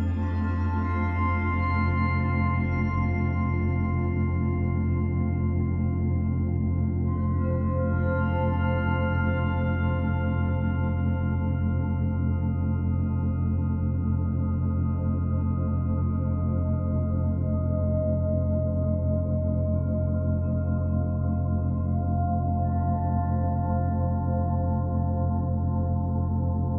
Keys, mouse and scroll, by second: 0.5 f, 1.2 s, 3.2 middle click, 3.5 g, 5.6 scroll down 1, 5.9 middle click, 6.8 Tab, 7.0 scroll down 6, 7.2-9.8 middle drag, 9.8 scroll down 1, 10.0 b, 10.6 o, 15.8 Tab, 16.2-16.8 scroll up 3, 16.8 scroll down 4, 17.1 a, 17.4 g, 18.8-19.3 scroll up 7, 19.3 g, 19.9 Tab, 20.1 scroll down 6, 20.3 b, 20.7 o, 22.3 Tab, 22.8 g, 23.2 middle click, 23.5 g, 24.2 Tab, 24.4 o.